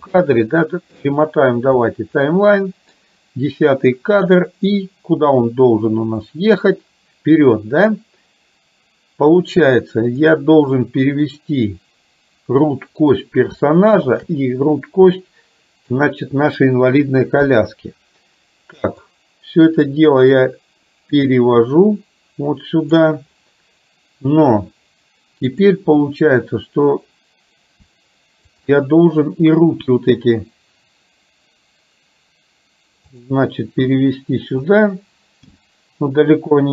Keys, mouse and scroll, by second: 0.5 middle click, 2.4 middle click, 12.7-13.2 middle drag, 14.2 shift+click, 15.3 middle click, 17.4 KP_3, 19.3-23.0 drag, 25.5 click, 29.7 g, 34.0 r, 35.5 g.